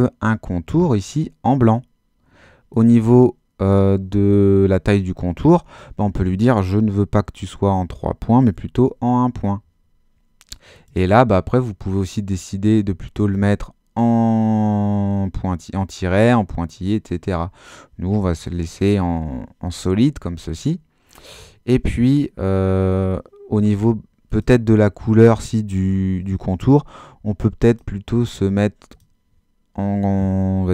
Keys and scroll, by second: 8.5 i.